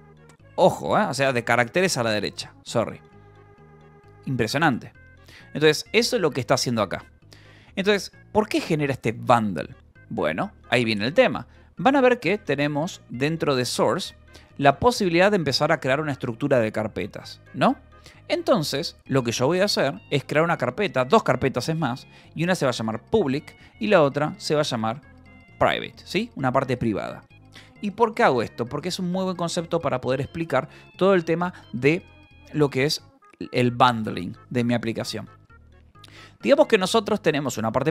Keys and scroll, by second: 4.1 0, 6.1 ctrl+j, 6.8 k, 7.7 j, 12.6 Escape, 12.8 j, 19.5 a, 21.8-25.3 typing, 25.7 Return, 36.1-37.0 typing, 37.4 Return.